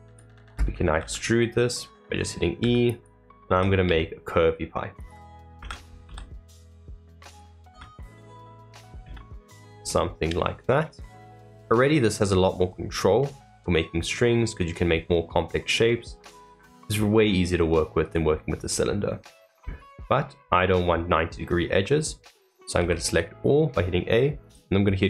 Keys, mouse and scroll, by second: 0.0 click, 9.8-11.1 middle drag, 11.1-11.8 scroll down 2, 11.8-20.4 middle drag, 20.4-20.8 scroll up 2, 20.8 middle click, 21.6-21.9 scroll down 1, 21.9 middle click.